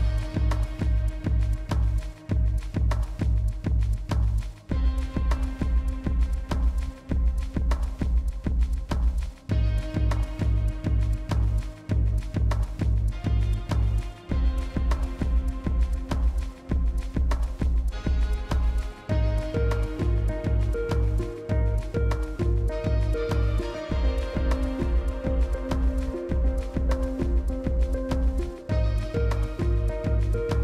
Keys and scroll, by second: 0.7 shift+s, 2.8 shift+s, 8.3-10.5 typing, 11.8 shift+s, 25.1 shift+s, 25.3 shift+s.